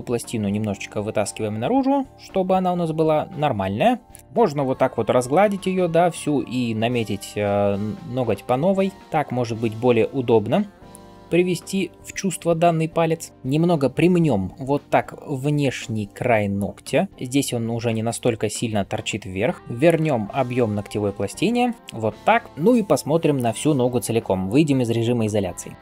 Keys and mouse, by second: 7.6 [, 7.7 [, 7.8 [, 7.9 [, 13.3 ], 17.6 [, 17.7 [, 17.8 [, 25.5 KP_Divide.